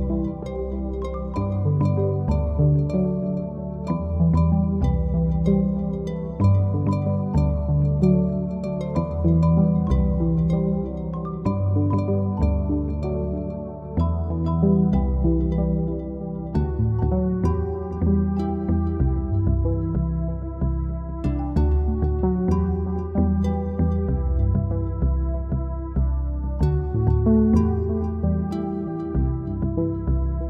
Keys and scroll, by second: 1.0 End, 2.0-2.8 typing, 2.9 Home, 9.3 Home, 10.7 End, 11.3-12.6 typing, 16.8-17.6 typing, 21.3 Home, 22.6 End, 23.1-24.4 typing, 26.2-26.9 typing.